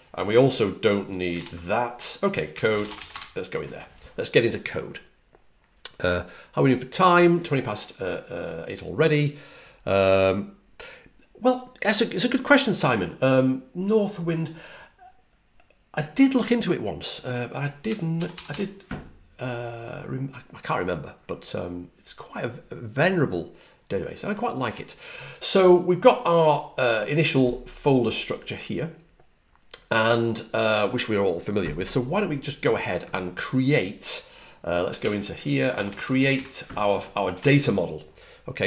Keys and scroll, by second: 1.3 ctrl+d, 2.3-3.4 typing, 18.1 super+=, 18.2 super+=, 18.4 super+=.